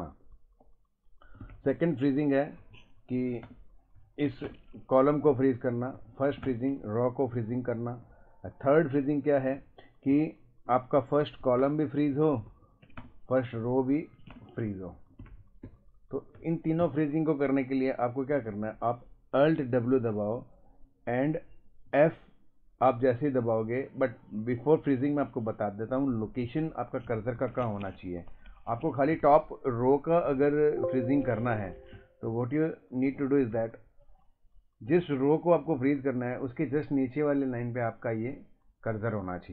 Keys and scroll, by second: 1.3 Right, 1.4 Down, 1.6 Up, 1.8 Left, 2.6 Down, 3.0 Up, 3.4 shift+space, 4.0 Down, 4.4 ctrl+space, 5.9 Up, 6.4 shift+space, 7.5 Down, 8.0 Right, 9.5 Left, 10.1 Down, 10.7 Right, 11.0 Left, 11.6 shift+space, 12.1 Down, 12.5 Up, 13.0 shift+space, 13.5 Down, 14.3 ctrl+space, 15.1 Right, 15.2 Down, 15.3 Left, 15.3 Right, 15.4 Up, 15.6 Right, 16.4 Up, 16.8 Down, 19.7 alt+w, 21.9 f, 27.9 Escape, 29.1 Right, 29.1 Down, 29.2 Left, 29.3 Right, 29.3 Up, 30.4 Down, 31.5 Escape, 31.9 Down, 32.2 Up, 33.5 Left, 34.9 Up, 36.8 Down.